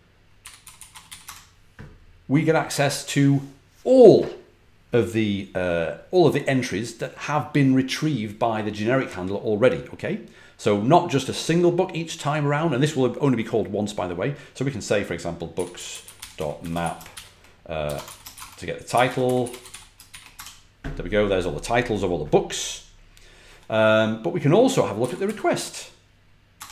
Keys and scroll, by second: 0.0-1.5 typing, 15.2-20.5 typing, 24.6-26.4 typing.